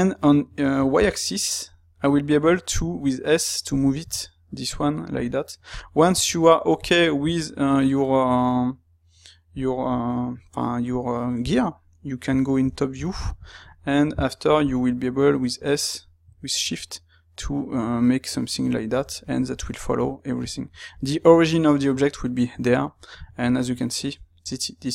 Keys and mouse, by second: 11.4 KP_7, 12.3-21.8 ctrl+middle drag, 22.9-24.9 ctrl+shift+middle drag.